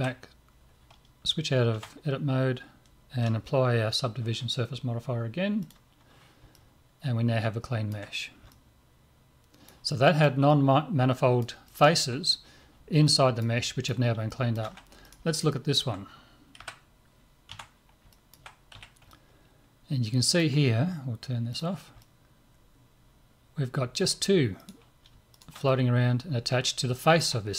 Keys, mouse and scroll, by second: 1.7 Tab, 5.7-8.1 drag, 6.5-15.1 middle drag, 15.1 right click, 16.6 KP_Divide, 17.2 middle click, 17.5 Tab, 18.1-21.5 middle drag, 18.7 z, 21.5-23.7 drag, 22.0-24.0 middle drag, 24.6 right click, 25.7-27.5 middle drag.